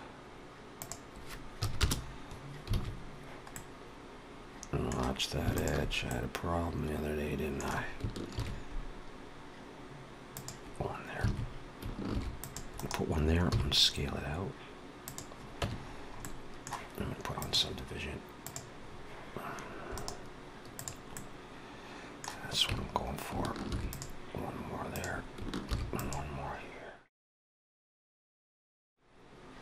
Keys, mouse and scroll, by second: 0.6 click, 2.6 alt+a, 3.4 middle click, 5.4 alt+shift+click, 5.9 middle click, 8.2 ctrl+b, 11.1 alt+a, 12.0 ctrl+r, 13.3 s, 15.4 Tab, 15.8-16.1 scroll down 3, 16.1 middle click, 17.2 click, 19.8 right click, 21.0 middle click, 22.5 Tab, 23.5 ctrl+r, 25.5 ctrl+r, 27.9 ctrl+r.